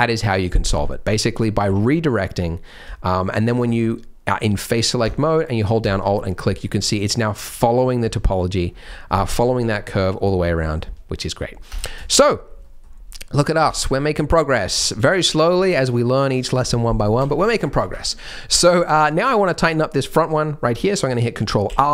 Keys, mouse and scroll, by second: 0.6 Tab, 0.9 scroll down 2, 1.6-2.2 scroll down 1, 1.6 3, 4.4-5.0 scroll up 3, 5.8 alt+click, 6.2-6.5 scroll down 8, 7.5 middle click, 7.7-8.6 scroll down 3, 8.6 scroll down 1, 10.5 middle click, 11.6 Tab, 12.0 shift+middle click, 12.6 middle click, 13.6 Tab, 13.8-14.1 scroll down 2, 14.3 shift+middle click, 14.7 shift+middle click, 15.0 scroll up 1, 15.2 middle click, 17.1 1, 18.7-20.7 scroll down 1, 21.6 ctrl+r.